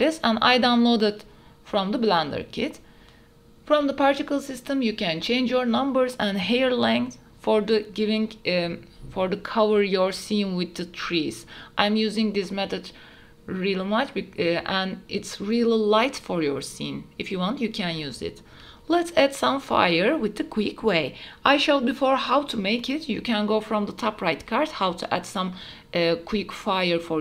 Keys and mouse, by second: 0.1 click, 0.7 click, 2.2 s, 2.6 g, 2.7 z, 3.3 click, 3.8 click, 4.2-8.3 drag, 9.0-12.9 drag, 12.9-14.7 right drag, 22.0 middle click, 23.6 shift+middle drag, 24.0 middle click.